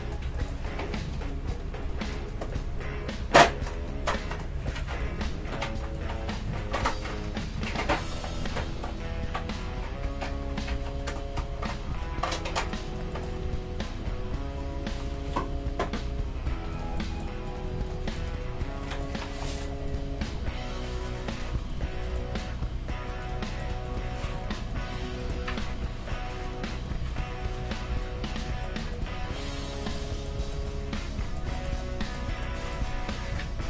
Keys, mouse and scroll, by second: 1.0 KP_3, 1.5-4.3 right drag, 3.2 g, 4.7 middle click, 5.0-7.9 right drag, 5.1 g, 6.8-9.9 drag, 7.5 z, 8.5 z, 9.0 g, 13.1-15.0 middle drag, 13.4 e, 15.5 e, 17.0-19.9 middle drag, 17.5-21.6 right drag, 18.2 g, 20.2 g, 22.1-23.8 middle drag, 22.3 g, 23.8-25.2 drag, 23.8-26.7 right drag, 25.3-26.9 drag, 25.3 g, 26.9-29.0 right drag, 27.6 g, 28.7-33.6 middle drag, 33.3 KP_3.